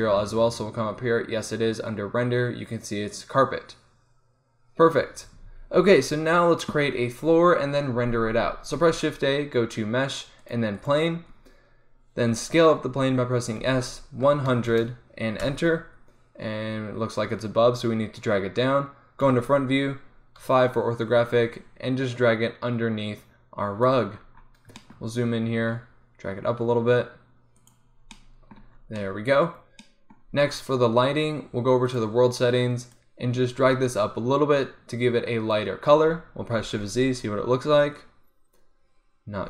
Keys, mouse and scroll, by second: 5.5-8.2 middle drag, 5.5 z, 5.6 z, 8.9 shift+a, 13.7 s, 19.3 KP_1, 20.5 KP_5, 21.5-22.5 middle drag, 22.5-23.7 drag, 24.0 click, 24.2 middle click, 25.6 g, 27.7 click, 32.0-35.5 drag, 35.5 middle click, 36.3 scroll up 1, 36.6 middle click, 37.0 shift+z.